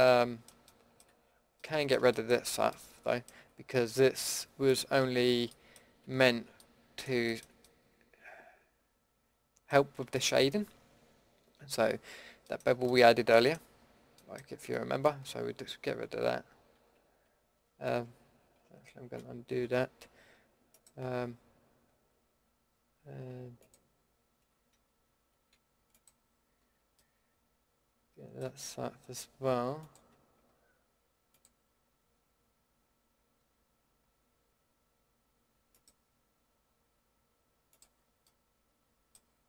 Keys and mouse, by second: 0.1-1.6 middle drag, 4.6 click, 5.1 middle click, 5.3 middle drag, 13.4 middle click, 13.8-15.1 middle drag, 15.1 ctrl+x, 18.6 ctrl+z, 26.9 click, 27.0-27.6 middle drag, 38.9-39.3 middle drag.